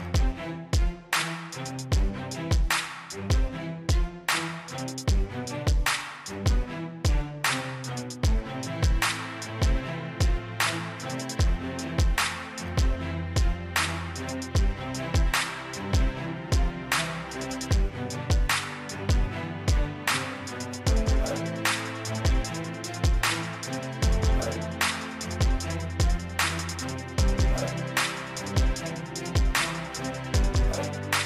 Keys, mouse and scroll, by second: 5.9 middle click, 8.8 click, 13.0 right click, 14.2 click, 14.6-16.7 middle drag, 17.9-20.7 drag.